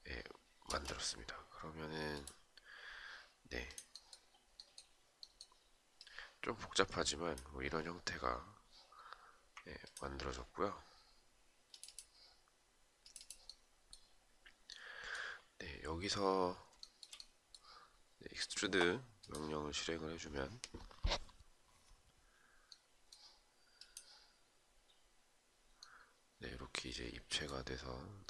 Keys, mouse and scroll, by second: 9.4 ctrl+click, 16.4 shift+right click.